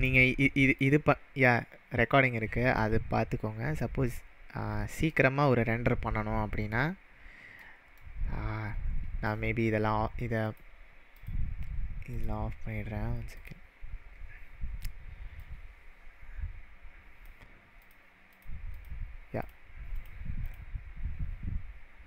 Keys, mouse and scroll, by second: 0.0 click, 0.8-1.6 click, 2.8-3.9 click, 5.1-6.9 middle drag, 8.2-8.5 scroll down 2, 10.5 click, 11.2 click, 12.1 click, 13.3 click, 13.7-15.0 scroll down 7, 15.4-17.2 drag, 18.3 click, 18.7 click, 19.4 click, 19.9 click, 20.4 click.